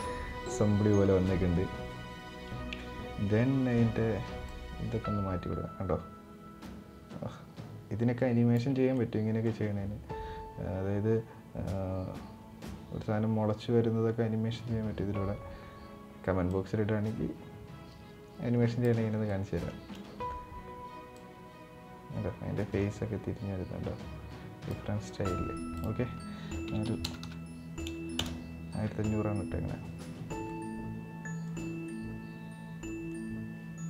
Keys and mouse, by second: 0.3-0.8 middle drag, 1.0 middle click, 4.2-8.2 drag, 8.7 middle click, 16.2-18.5 drag, 19.0 middle click, 20.9-24.4 drag, 25.5-28.5 drag, 27.0 KP_0, 28.8-30.1 middle drag, 30.2-31.3 middle drag, 31.8-33.0 middle drag.